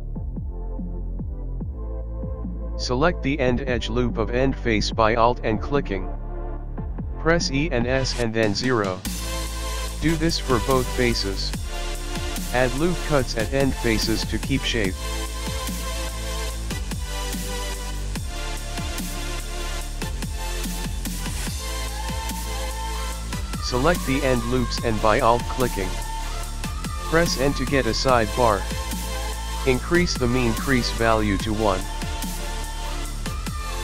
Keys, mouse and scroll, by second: 0.8 ctrl+r, 1.6 middle click, 1.9 click, 2.1 middle click, 3.0-3.5 scroll up 3, 4.2 click, 5.7 e, 9.2 ctrl+r, 14.0-14.5 scroll down 2, 14.5 middle click, 14.5 scroll down 1, 16.0 click, 16.7 click, 16.8 click, 17.3 e, 18.1 ctrl+r, 20.1 click, 21.4 Tab, 21.4 middle click, 21.9-24.1 scroll up 5, 22.1 middle click, 22.8 Tab, 24.7 alt+click, 27.2 n, 28.7 click, 30.8 click, 31.3-31.8 scroll down 4, 31.8 middle click, 33.5 alt+click.